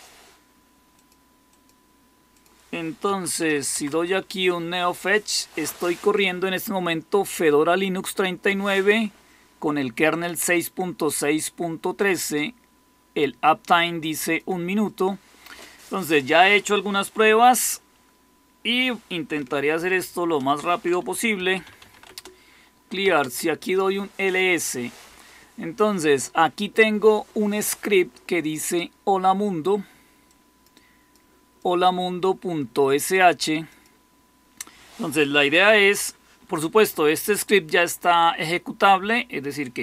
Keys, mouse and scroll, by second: 2.7-3.9 typing, 19.7 ctrl++, 21.0-23.3 typing.